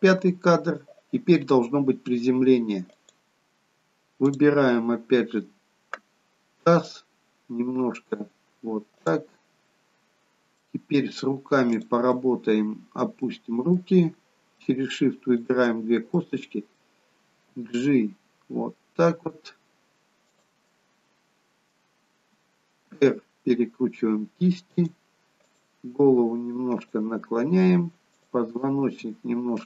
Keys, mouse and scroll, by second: 3.1-3.6 scroll up 2, 4.3 click, 6.6 g, 10.7 middle click, 11.8 click, 12.2 middle click, 13.4 middle click, 15.7 shift+click, 16.3 middle click, 17.6 g, 20.7 middle click, 22.9 r, 25.8 click, 26.2 r, 28.3 click, 28.9 r.